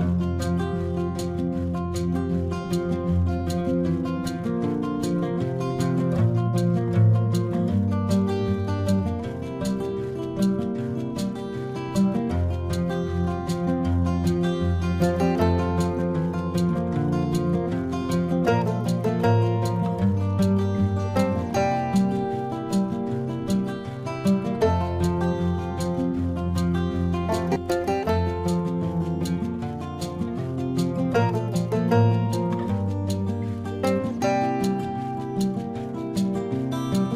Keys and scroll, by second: 7.4 ctrl+alt+z, 8.6 ctrl+-, 10.2 ctrl+-, 10.3 ], 11.5 ctrl+-, 12.3 ctrl+-, 12.7 space, 13.3 ], 14.4 ctrl+-, 25.6 ctrl+-, 26.3 space, 28.1 ctrl+-, 29.2 space, 30.1 ctrl+-, 31.0 ], 32.2 space, 34.0 ], 34.2 ctrl+-.